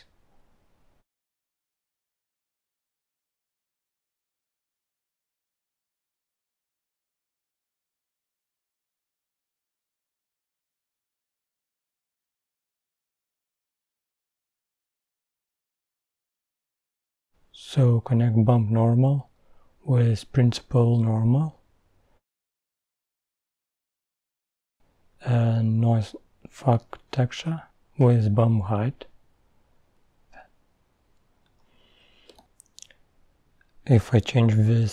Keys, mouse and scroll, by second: 1.6 click, 4.1 click, 5.9-6.4 middle drag, 6.4 scroll up 2, 6.6-7.2 middle drag, 7.2 click, 25.9-26.8 middle drag, 26.8-27.6 scroll up 5, 30.0 click, 31.1-33.3 scroll up 4, 33.3-34.6 scroll up 1, 34.6-34.9 drag.